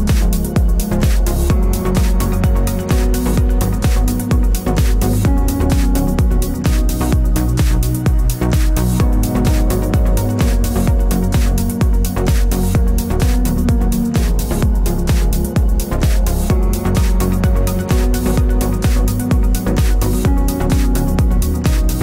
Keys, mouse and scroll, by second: 2.3 click, 3.1-7.8 drag, 3.8 KP_Enter, 5.5 alt+h, 11.9-13.3 drag, 12.7 KP_Enter, 16.3 click, 16.6 click, 17.1-17.6 scroll down 1, 18.4 click, 18.8 click, 19.3 shift+click, 19.9 m, 20.7-21.8 scroll up 2, 21.8 click.